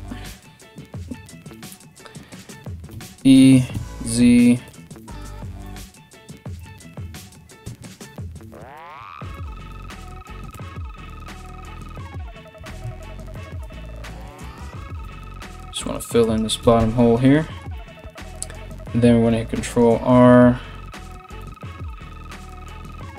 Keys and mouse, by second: 2.5 e, 7.2 2, 7.5 right click, 8.4 right click, 8.9 shift+right click, 10.1 f, 12.2 ctrl+r, 14.0 right click, 14.6 f, 14.8 f, 15.8 right click, 16.2 f, 16.4 f, 18.9 ctrl+r, 21.5 ctrl+b.